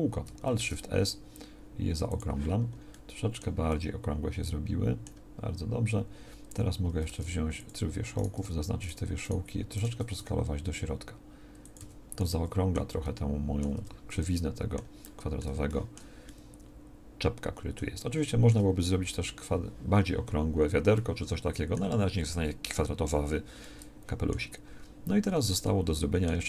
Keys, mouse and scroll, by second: 7.0 ctrl+Tab, 10.2 s, 11.8 a, 13.7 Tab.